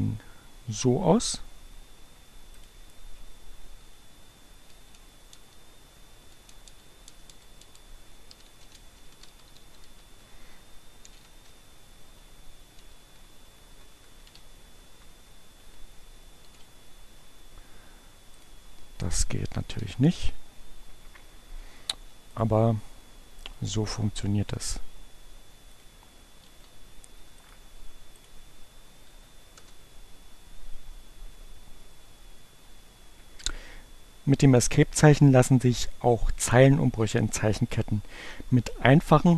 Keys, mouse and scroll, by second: 2.5 click, 3.4 Delete, 5.9 BackSpace, 8.1-12.3 typing, 12.9 Left, 13.9 shift+2, 14.4 shift+Right, 14.9 Delete, 16.2 shift+1, 18.4 click, 19.1 click, 19.5 Up, 19.9 Return, 22.1 click, 25.4 click, 27.3 click, 28.1 click, 28.9 Up, 29.3 Return.